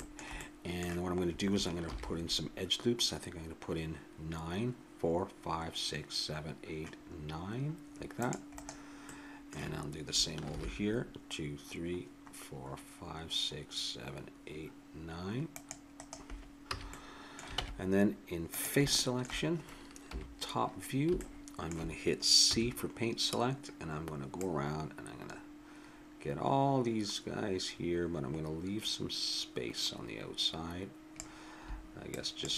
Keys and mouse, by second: 0.7-1.8 middle drag, 1.8 ctrl+r, 9.1 middle click, 10.4 ctrl+r, 16.7 a, 17.6 ctrl+Tab, 20.1 KP_7, 22.4 c.